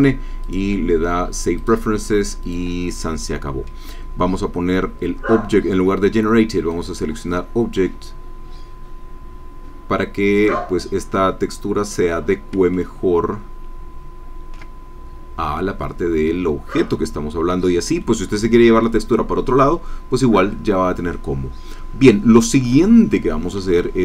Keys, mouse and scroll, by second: 1.8 click, 2.5 click, 3.3 middle click, 6.7-7.9 drag, 11.5 scroll up 1, 12.1 scroll down 1, 12.7 ctrl+click, 12.8 ctrl+scroll down 1, 18.0 click, 20.5 click, 21.5 scroll up 1, 21.6 scroll down 1, 21.9-22.3 scroll up 1, 22.3 scroll down 1, 22.3 scroll up 1, 22.4-23.4 scroll down 2, 23.8 shift+click.